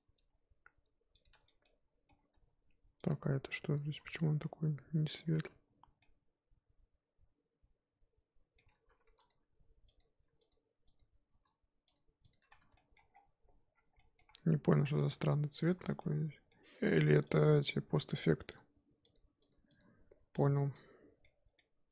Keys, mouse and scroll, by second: 0.0 g, 1.3 Tab, 1.6-2.1 middle drag, 2.1 scroll up 2, 2.3 Tab, 3.1 click, 4.9-5.4 scroll up 1, 5.4 Tab, 6.0-8.6 middle drag, 8.6 Tab, 9.3 click, 10.0 click, 10.9 click, 11.9 ctrl+click, 12.3 ctrl+click, 12.6 Tab, 12.7-13.1 middle drag, 13.1-13.7 scroll down 8, 13.7-14.4 scroll up 5, 13.9 middle drag, 14.9 Tab, 15.8 Tab, 16.0-18.5 middle drag, 18.5 click, 19.0 click, 19.4 click, 20.3 click, 20.7-21.4 middle drag, 21.4 scroll down 2, 21.5-21.9 middle drag.